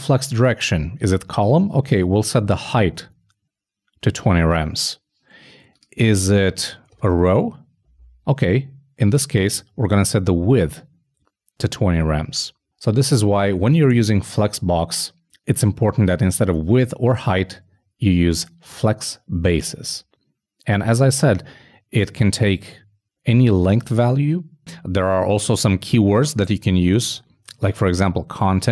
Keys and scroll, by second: 7.4 super+w, 7.5 super+s, 27.7 super+s.